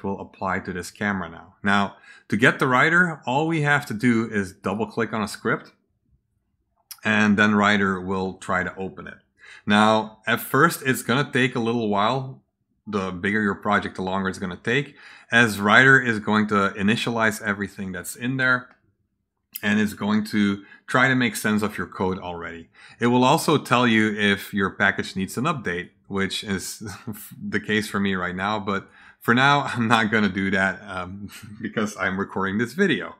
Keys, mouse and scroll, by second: 3.3 click, 4.5 click, 4.6 click, 6.9 click, 25.6 click, 28.6 click.